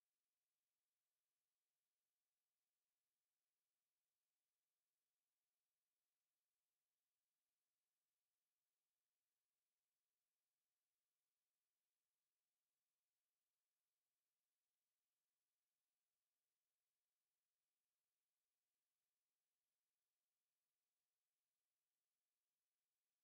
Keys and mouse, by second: 0.0 alt+right click, 0.5 alt+click, 0.9 right click, 1.6 click, 11.7 ctrl+z, 12.9 click, 14.9 alt+click, 18.8 alt+click, 20.1 alt+click, 20.9 alt+right click, 21.3 alt+click, 22.0 alt+click.